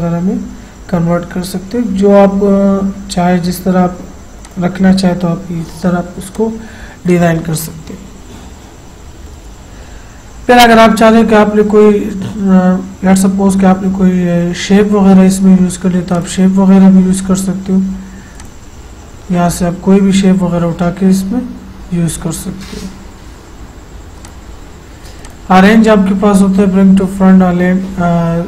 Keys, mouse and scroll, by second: 4.4 click, 4.5 click, 16.2 click, 18.4 click, 24.2 click, 24.3 click.